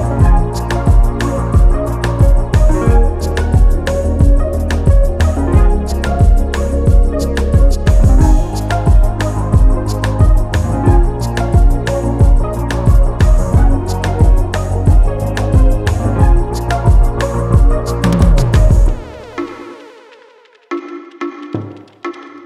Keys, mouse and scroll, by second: 1.2 shift+click, 2.5 click, 4.4 ctrl+d, 5.9 click, 7.1 click, 8.6 ctrl+d, 10.1 click, 10.9 click, 11.9 click, 12.8-13.4 ctrl+scroll up 2, 14.2 ctrl+shift+click, 15.4 ctrl+shift+g, 17.6 click, 18.6-19.1 ctrl+scroll down 2, 21.3 KP_5.